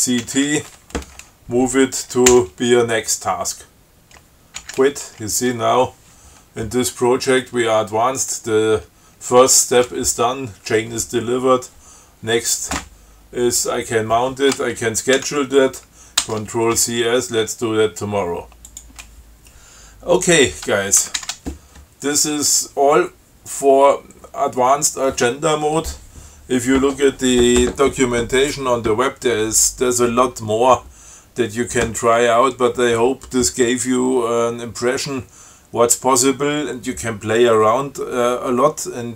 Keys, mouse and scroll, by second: 0.2 ctrl+c, 0.5 ctrl+t, 2.6 n, 4.9 q, 15.5 ctrl+c, 16.5 ctrl+s, 18.9 click, 21.3 ctrl+x, 21.5 ctrl+s.